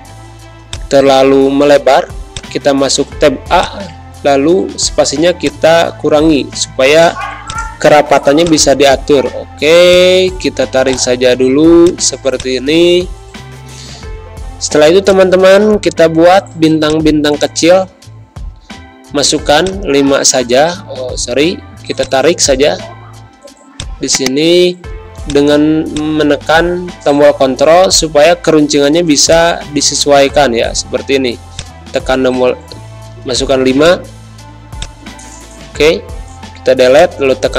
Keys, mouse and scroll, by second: 0.6-11.5 shift+drag, 11.5 z, 11.8 click, 12.0 space, 12.3 click, 12.6 space, 15.0-16.8 drag, 18.8 5, 19.5 click, 20.7 ctrl+z, 22.0 click, 22.9 ctrl+z, 23.7 click, 24.8 z, 25.2 click, 29.2-34.7 drag, 35.9 ctrl+z, 36.9-37.5 drag.